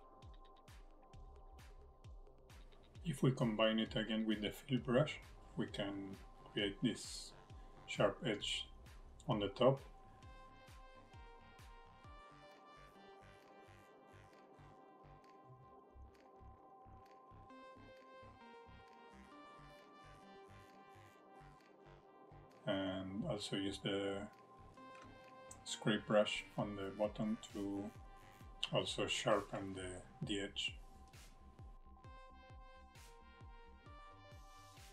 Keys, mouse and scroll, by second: 3.4 shift+middle click, 4.0 scroll up 2, 4.3 shift+middle click, 6.6 click, 16.7 middle click, 18.2-18.5 scroll up 1, 18.6 shift+middle click, 20.3 middle click, 21.8 click, 23.0 click, 24.7 click, 25.3 scroll up 2, 25.7 shift+middle click, 26.6-27.9 scroll down 1, 28.4-28.8 scroll up 1, 31.6 click.